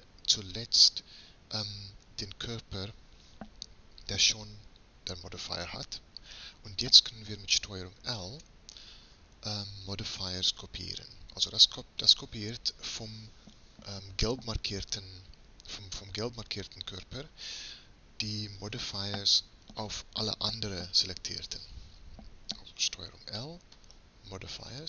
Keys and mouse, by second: 8.2 ctrl+l, 23.2 ctrl+l.